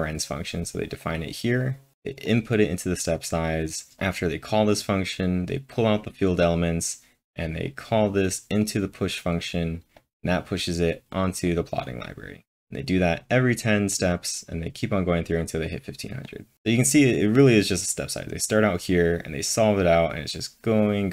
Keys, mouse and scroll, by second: 0.1 click, 0.9 click, 1.9 click, 2.3 click, 2.3-3.9 drag, 4.0-11.5 drag, 4.5-5.3 typing, 8.0 click, 8.9 click, 11.8 click, 13.7-14.5 typing, 16.3-17.0 typing.